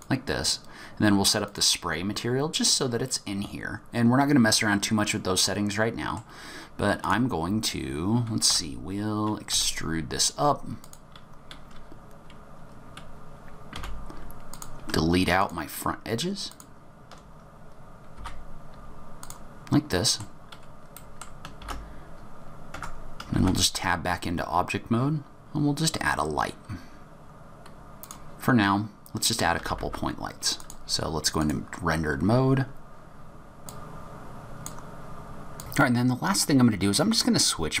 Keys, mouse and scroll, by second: 3.4-5.4 scroll up 9, 5.4 middle click, 6.5-7.7 scroll down 2, 7.0 click, 8.4 Tab, 9.6 e, 11.4-12.1 scroll down 5, 12.0-12.5 scroll up 3, 12.5-13.7 scroll down 4, 13.7 2, 14.5 click, 15.3 shift+click, 16.4 click, 18.1 x, 19.8 middle click, 20.2-20.9 scroll up 3, 20.9 middle click, 21.5 shift+a, 22.7 Tab, 23.3 shift+a, 29.5 g, 31.4 click, 33.6 click, 33.7 click, 33.7 scroll up 2, 33.8 middle click, 33.8 scroll down 2, 34.0 x, 34.1 g, 34.2 click, 34.3-34.8 scroll down 5, 34.3 shift+d, 34.4 shift+d, 34.5 middle click, 34.6 middle click, 34.6 middle click, 34.6 scroll up 2, 34.8 middle click, 34.8 click, 35.1 shift+click, 35.2 shift+click, 35.3 click, 35.4 click, 35.5 middle click, 35.5 KP_0, 35.6 middle click, 35.6-37.8 scroll up 1.